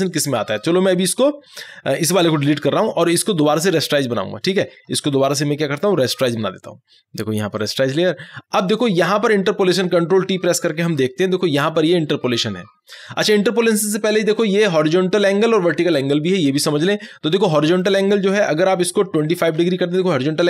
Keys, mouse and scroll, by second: 0.6 ctrl+click, 2.5 ctrl+Delete, 3.2 ctrl+click, 3.3-6.2 ctrl+drag, 6.2 ctrl+right click, 7.6 ctrl+click, 10.8 ctrl+t, 17.4-19.2 drag, 19.2 2.